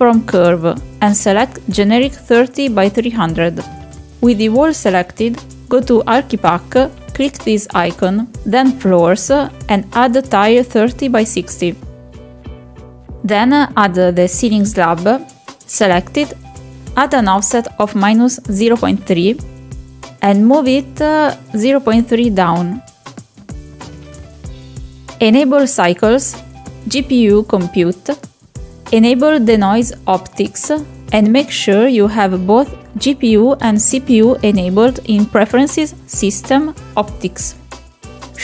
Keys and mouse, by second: 0.6 click, 2.9-3.2 middle drag, 3.6 shift+middle drag, 5.2 click, 5.8 click, 6.8 click, 7.8 click, 13.0 click, 14.5 click, 15.6-17.2 drag, 18.0 middle click, 18.9 click, 20.1-20.8 drag, 22.7-23.9 drag, 24.3 middle click, 25.2 middle click, 25.4 shift+middle drag, 25.8 middle click, 26.1 middle click, 26.8 click, 27.4 click, 28.3 click, 30.2 click, 30.4 click, 30.8 click, 32.4 click, 38.1 shift+right click.